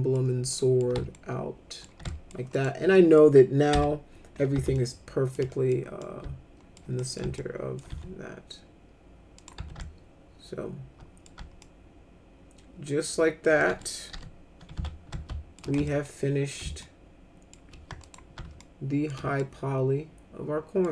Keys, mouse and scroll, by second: 0.5 middle click, 1.1 alt+middle click, 2.0 alt+middle click, 2.5 click, 2.9 middle click, 3.7 F4, 4.7 alt+shift+middle click, 5.5 middle click, 6.0 alt+middle click, 7.0 middle click, 7.3 alt+middle click, 7.9 z, 9.4 click, 9.5 z, 9.8-11.2 alt+middle drag, 11.6-13.4 alt+middle drag, 13.6 middle click, 14.1 p, 14.8 z, 15.1 alt+shift+middle click, 15.8 ctrl+alt+middle click, 16.8 alt+shift+middle click, 18.0 click, 18.6 alt+shift+middle click, 19.3-20.8 alt+middle drag.